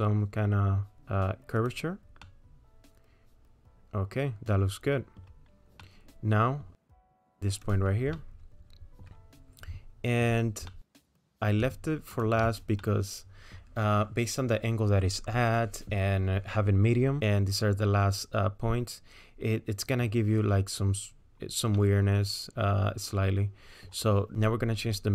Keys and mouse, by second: 2.2-5.2 middle drag, 5.8 middle click, 6.8 middle click, 7.7 click, 8.2 middle click, 10.7 middle click, 12.1 shift+click, 12.9 middle click, 17.2-20.0 middle drag, 19.9 click, 19.9 right click, 21.8-23.9 drag, 21.8-23.9 middle drag, 21.8-23.9 right drag, 24.4-25.1 drag.